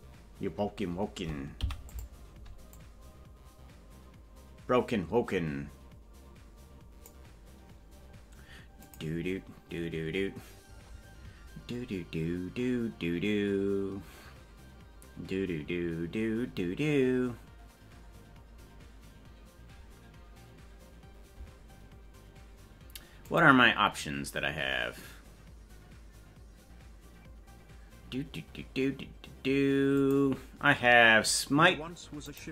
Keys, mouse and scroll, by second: 1.6 i, 2.8-7.2 drag.